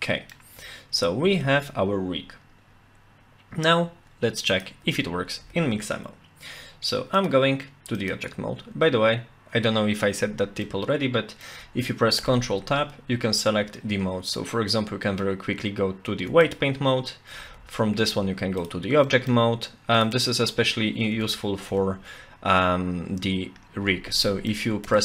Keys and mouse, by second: 1.2 ctrl+s, 4.6 click, 4.9 Tab, 5.4 Tab, 7.1-8.1 drag, 10.6-11.5 middle drag, 12.2 ctrl+Tab, 17.4 ctrl+Tab, 19.1 middle click, 21.1 Tab, 21.7 Tab, 24.1 middle click, 24.8 Tab.